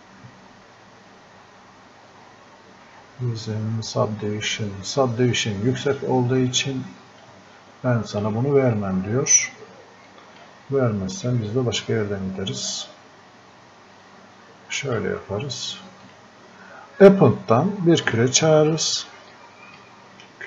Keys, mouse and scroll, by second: 7.2-20.4 drag.